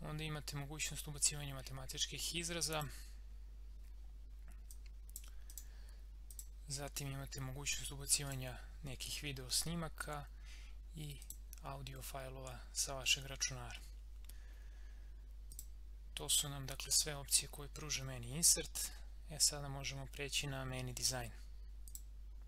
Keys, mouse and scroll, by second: 2.7 click, 11.2 click, 15.5 click, 21.8 click.